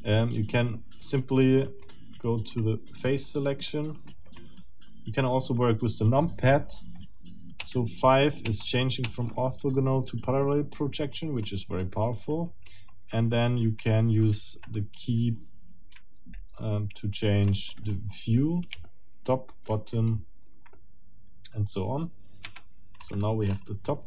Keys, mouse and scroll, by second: 1.8 click, 2.6-3.4 scroll up 4, 3.7 middle click, 4.1-4.9 scroll down 2, 7.6 KP_5, 10.1 scroll down 1, 11.4-12.0 scroll up 2, 12.7 KP_1, 13.7 scroll down 2, 14.3 KP_3, 15.9 KP_7, 17.5-18.1 scroll up 2, 18.8-19.8 shift+middle drag, 20.1-20.7 shift+scroll down 2, 20.7-22.1 middle drag, 22.4 7, 23.0-23.8 scroll up 2.